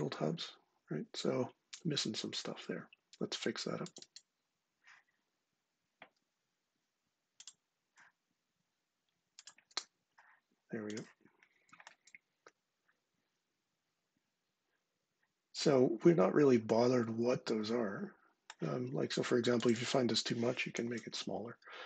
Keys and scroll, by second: 20.5 4, 20.7 Return.